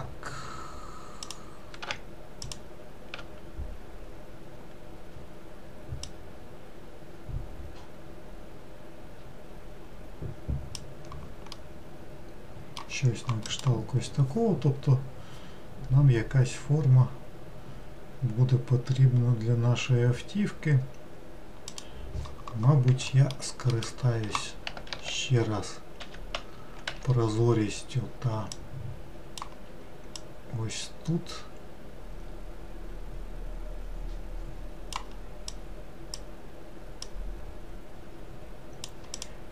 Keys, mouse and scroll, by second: 1.3 click, 2.5 shift+click, 6.1 click, 11.6-14.7 middle drag, 23.1 alt+middle click, 23.7 alt+middle click, 24.9 alt+z, 26.9 1, 28.6 click, 30.2 click, 35.5 click, 37.1 click, 39.2 click.